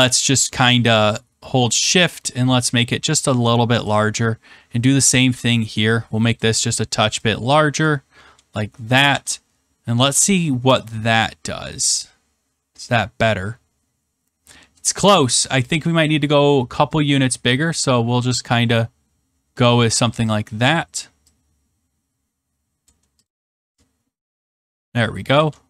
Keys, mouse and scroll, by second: 3.2 shift+click, 3.9 click, 6.3 shift+click, 7.7 click, 9.0 ctrl+s, 10.9 click, 11.7-12.2 scroll, 12.3 click, 14.7 middle click, 15.6 click, 19.8 shift+click, 20.9 click, 22.8 shift+click, 23.7 click, 24.5 shift+click, 25.3 ctrl+s.